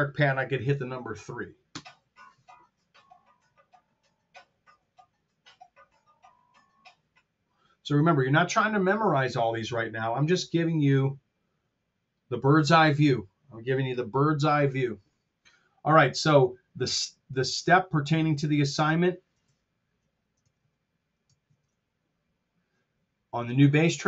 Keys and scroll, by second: 1.8 KP_3, 19.3 super+`, 20.2 super+Tab, 21.4 shift+super+Tab.